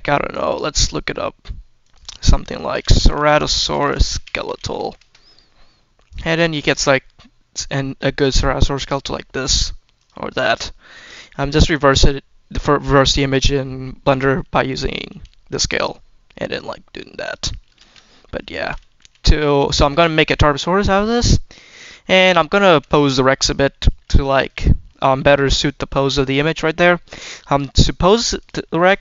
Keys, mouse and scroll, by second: 14.0 click, 14.5 click, 15.0 s, 15.5-17.1 drag, 17.7 ctrl+z, 17.9-18.3 scroll down 2, 18.4 shift+middle click, 18.9 g, 19.2 click, 20.1 click, 20.9 click, 22.2 click, 22.5 s, 22.9 click, 23.8 g, 24.3-26.0 drag, 26.6-27.0 drag, 27.4-28.2 scroll up 1, 28.2 click, 28.5 shift+middle drag, 28.8-29.0 scroll up 3.